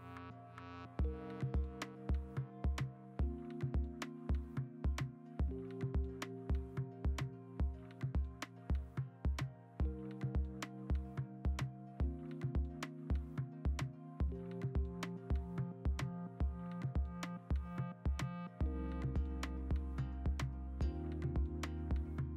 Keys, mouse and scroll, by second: 6.6-8.4 typing, 10.8 l, 13.8 Escape, 14.8-16.7 typing, 14.8 alt+BackSpace, 16.2 ctrl+u, 16.6 Escape, 17.2 alt+BackSpace, 18.3 alt+BackSpace, 18.3 ctrl+d, 19.0 ctrl+alt+z, 19.1 ctrl+alt+z, 19.7 alt+BackSpace, 19.8 ctrl+d, 21.6 v, 21.9 ctrl+u.